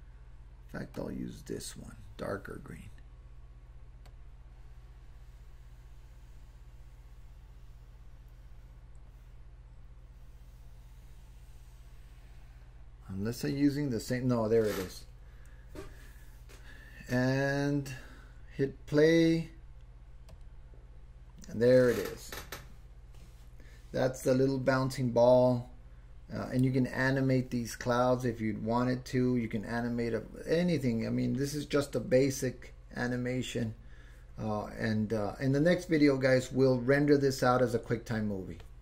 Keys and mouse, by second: 4.1-13.5 drag, 19.3 click, 20.3 click.